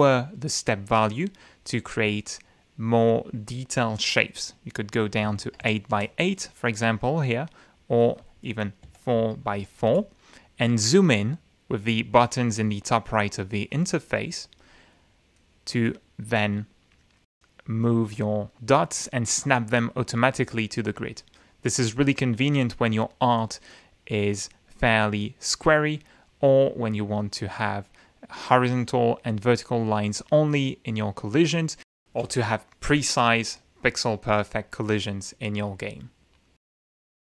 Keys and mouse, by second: 5.2 8, 5.4 Tab, 5.6 8, 5.9 Return, 8.0 click, 8.8 4, 9.1 Tab, 9.5 4, 9.9 Return, 13.7 click, 14.3 click, 14.9-15.5 middle drag, 17.8 click, 33.3 click, 33.9-35.3 typing, 37.1 click.